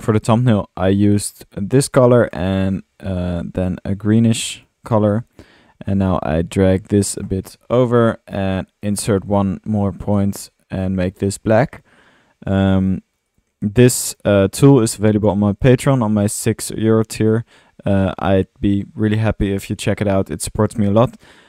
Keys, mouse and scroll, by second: 2.3 click.